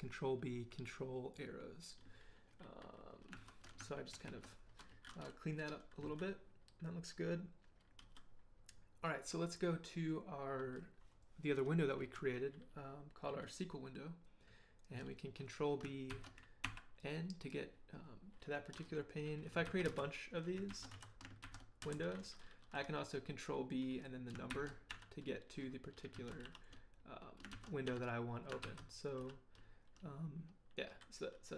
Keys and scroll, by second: 3.4 ctrl+b, 3.9 ctrl+Right, 4.0 ctrl+Right, 6.1 ctrl+h, 8.0 k, 16.1 ctrl+b, 16.6 ctrl+n, 19.6 ctrl+b, 19.8 ctrl+c, 20.7 ctrl+b, 20.9 ctrl+c, 21.4 ctrl+b, 21.8 ctrl+c, 24.5 ctrl+b, 24.9 3, 26.1 ctrl+b, 26.4 1, 27.5 ctrl+b, 27.8 0, 29.2 ctrl+b, 29.2 2.